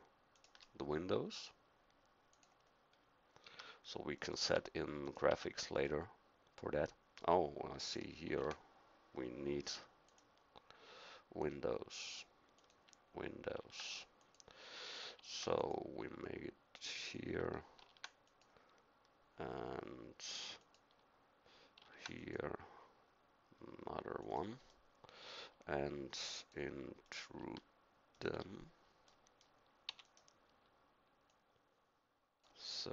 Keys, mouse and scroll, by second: 2.9 middle click, 3.4 a, 4.4 Tab, 5.3 Tab, 8.2 ctrl+r, 13.5 ctrl+r, 15.1 ctrl+r, 17.8 ctrl+r, 21.8 ctrl+r, 24.7 middle click, 29.0-32.9 drag, 29.9 e.